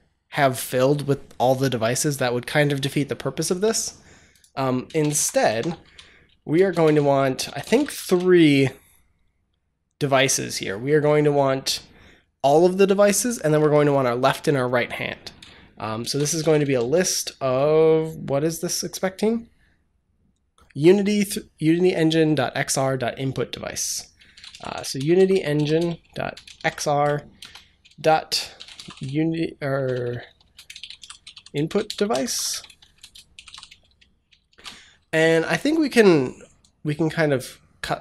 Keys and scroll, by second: 4.8 Return, 5.0 Up, 5.3 Tab, 5.7-8.3 typing, 6.7 Return, 15.7-17.1 typing, 23.9-34.3 typing.